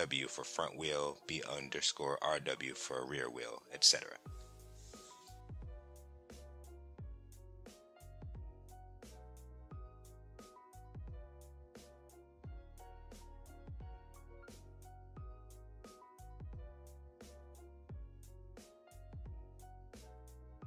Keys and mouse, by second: 0.7 click, 2.6 click, 3.4-7.9 drag, 6.1 o, 8.3 click, 8.6 click, 9.8 click, 10.0-11.3 drag, 10.7 e, 11.6 click, 11.8-13.4 drag, 13.5 middle click, 14.1-15.4 drag, 15.5 click, 15.8 click, 16.9 click, 17.3 click, 18.4 click.